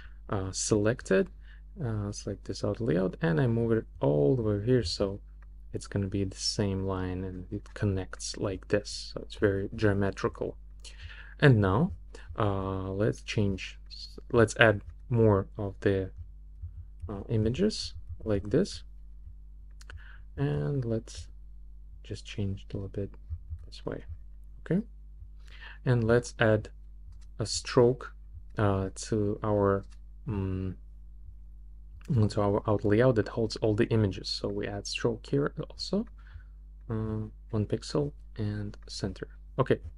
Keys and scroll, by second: 16.6 super+d.